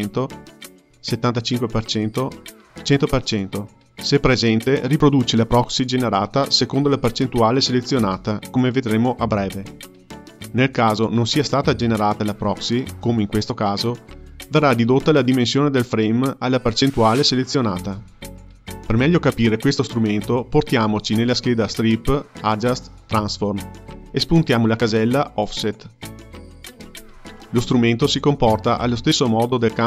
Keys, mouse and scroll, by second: 20.3 click, 21.9-28.2 drag.